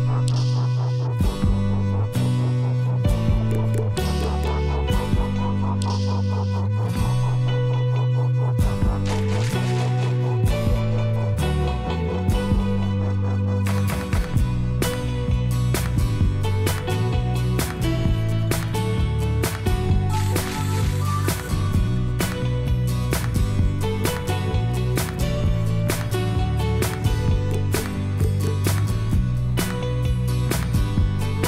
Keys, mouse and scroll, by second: 13.1 m, 28.6 shift+F2.